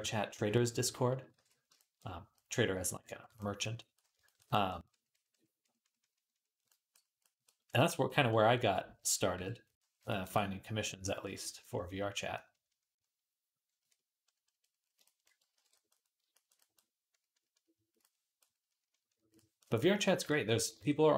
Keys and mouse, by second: 1.2 alt+q, 1.6 shift+click, 1.8 click, 2.0 click, 2.0 right click, 2.4-9.2 drag, 2.4-7.2 right drag, 3.2-7.2 middle drag, 7.4 middle click, 7.4 right click, 9.2 KP_3, 10.0-12.4 ctrl+drag, 10.0-12.4 ctrl+middle drag, 10.0-12.4 ctrl+right drag, 15.4 alt+q, 16.0-19.2 ctrl+drag, 20.6 ctrl+Tab.